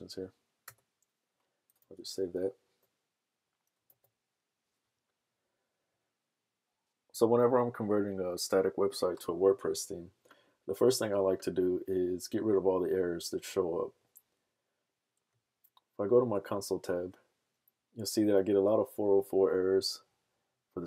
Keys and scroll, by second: 1.8 super+s, 2.2 super+Tab, 4.0 super+r.